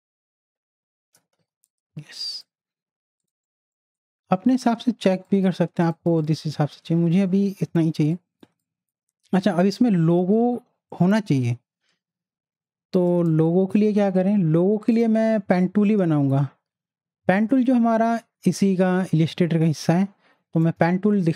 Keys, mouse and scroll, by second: 1.4 z, 1.7-3.2 drag, 6.9 z, 8.1 click, 8.4 space, 8.6 click, 8.9 space, 12.6 space, 13.1 click, 13.3 space, 13.5 click, 13.8 space, 14.9 click, 18.1 right click.